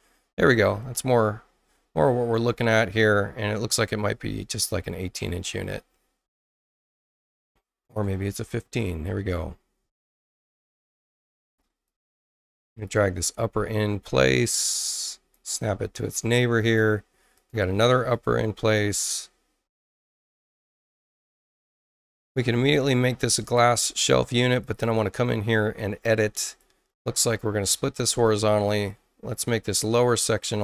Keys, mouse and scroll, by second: 0.8 click, 2.3 click, 3.5-4.5 drag, 7.3 click, 11.8 click, 12.7 click, 14.0-15.3 drag, 16.6 click, 17.3 click, 18.1 click, 19.0-21.3 drag, 22.9 click, 23.4 click, 24.2 space, 24.6 click, 24.8 click, 26.4 click, 27.6 click, 28.2 click, 28.7 click, 29.3 click, 30.5 click.